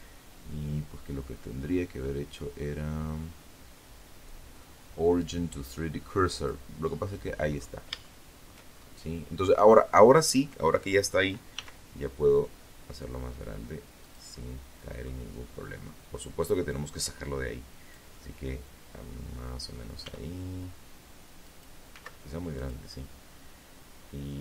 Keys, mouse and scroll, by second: 4.5 click, 5.7-6.1 scroll up 3, 6.1 shift+middle click, 6.8-7.3 shift+scroll up 3, 7.4 scroll down 2, 8.0 middle click, 9.7 s, 12.2 click, 12.5 middle click, 13.5 scroll down 1, 14.2-14.9 scroll down 1, 14.9-16.3 drag, 16.3-18.1 middle drag, 18.2 s, 19.6 click, 20.1 s, 20.7 click, 21.1-22.9 middle drag, 23.7 click.